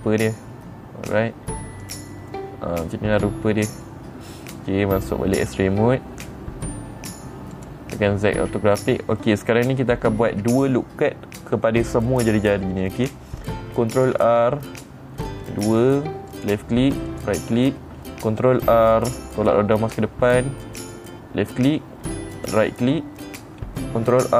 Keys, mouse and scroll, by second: 2.3 click, 2.8-4.8 middle drag, 5.8 click, 8.0 click, 14.7 ctrl+r, 15.9 middle click, 16.8 click, 17.6 right click, 19.0 ctrl+r, 19.9-21.1 middle drag, 21.1 click, 22.8 right click.